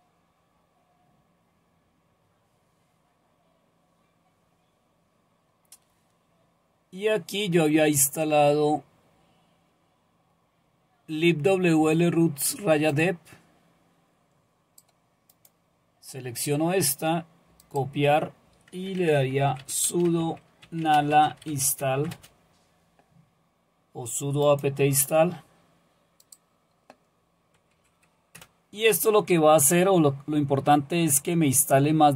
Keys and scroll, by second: 19.1-22.5 typing, 27.7 Right.